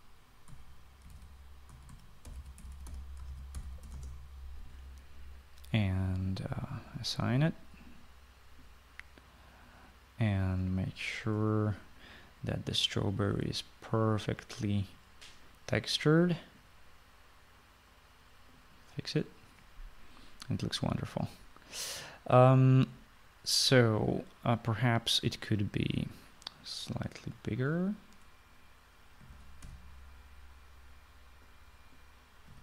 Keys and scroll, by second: 1.4-5.3 typing, 29.9-31.1 typing.